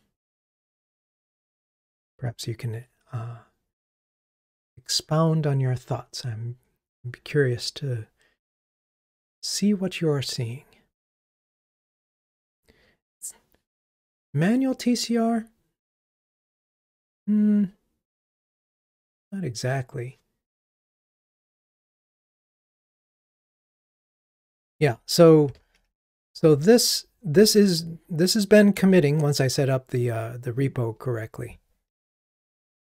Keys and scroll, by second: 0.3 super+9, 25.9 super+9.